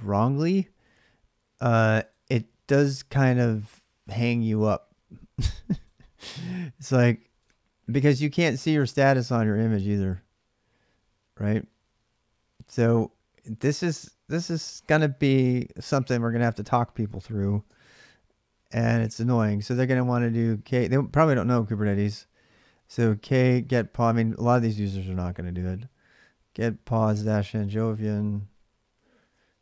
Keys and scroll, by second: 14.6 alt+Tab, 17.1 ctrl+a, 17.4-19.5 typing, 23.1-29.6 typing.